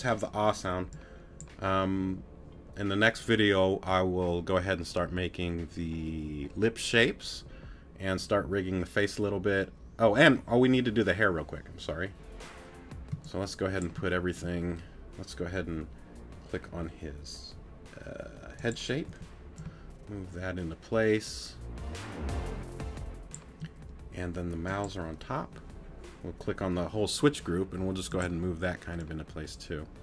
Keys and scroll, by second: 13.1 space, 19.1 t.